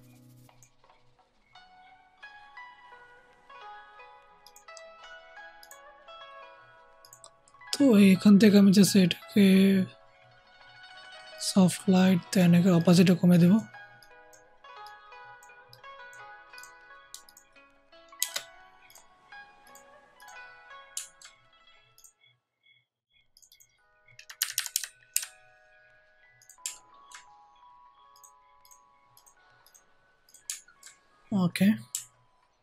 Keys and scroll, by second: 18.1 BackSpace, 24.3 Up, 24.4 Up, 24.6 Up, 25.0 Up.